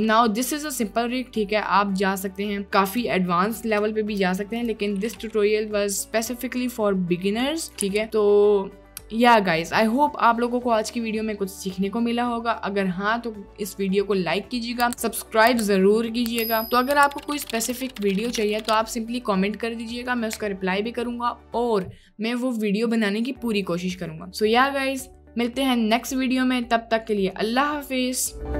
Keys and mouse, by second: 1.2 click, 2.3-2.6 drag, 2.6 ctrl+s, 3.0 click, 4.2 KP_Decimal, 4.7 drag, 5.0-5.3 drag, 5.7 click, 7.3 drag, 7.7 click, 8.0 ctrl+s, 8.2 click.